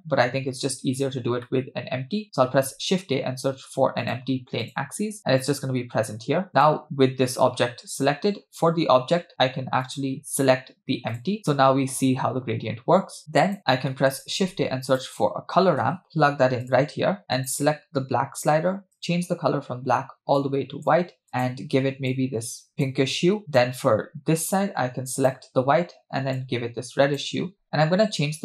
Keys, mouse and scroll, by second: 1.5 middle click, 2.5 shift+a, 6.5 click, 9.9-11.4 drag, 13.2 click, 13.9 middle click, 14.3 shift+a, 17.3 click, 19.0 click, 23.5 click, 25.2 click.